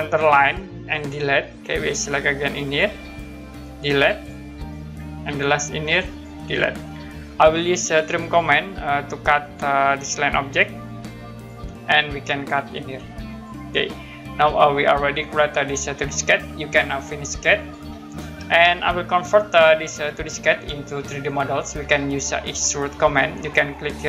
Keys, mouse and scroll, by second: 1.1 Delete, 2.6 click, 3.7 Delete, 4.1 click, 6.1 click, 6.5 Delete, 9.4 click, 11.4 click, 13.3 click, 13.9 scroll down 1, 15.9 middle click, 17.5 click, 18.9 middle click, 21.4-21.9 scroll down 1, 22.6 middle click.